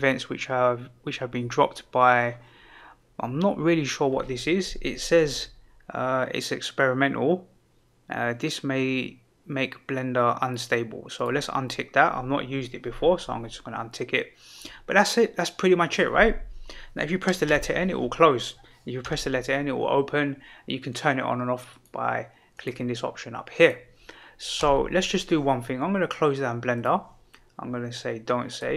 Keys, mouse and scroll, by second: 11.1 click, 17.4 n, 19.0 n, 24.5 n.